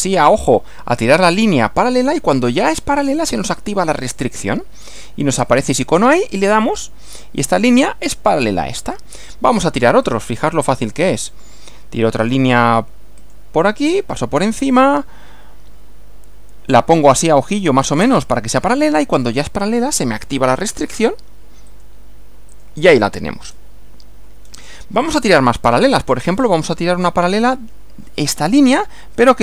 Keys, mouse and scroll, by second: 6.3 click, 10.0 click, 13.2 click, 21.7 click, 22.6 click, 23.5 scroll down 2, 24.4 scroll down 2, 25.1 shift+middle click, 26.2-26.6 shift+scroll up 3.